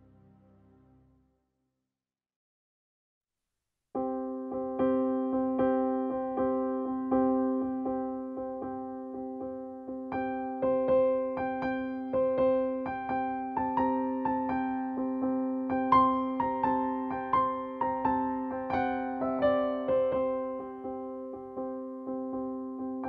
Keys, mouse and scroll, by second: 0.4-7.4 drag, 9.6 click, 11.7 1, 15.8 typing, 16.3 click, 18.9-23.0 drag.